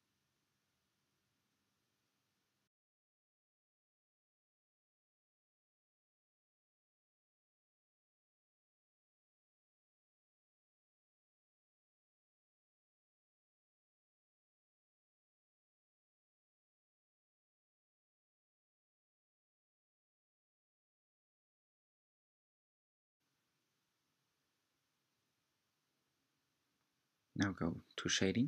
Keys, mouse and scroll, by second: 0.6 shift+click, 1.7 f, 2.1-2.8 scroll down 2, 2.8-4.3 middle drag, 4.3 Tab, 4.9-5.7 scroll down 2, 5.7-8.8 middle drag, 8.8 click, 9.9-11.8 middle drag, 11.8 Tab, 12.0-14.4 middle drag, 14.4 Tab, 14.8 drag, 15.4-18.3 middle drag, 18.3-19.1 scroll up 4, 19.1 middle click, 19.8-20.3 scroll down 4, 20.3-21.7 middle drag, 21.7 drag, 22.7 shift+click, 23.4 scroll down 2, 23.6-25.5 middle drag, 25.5 click.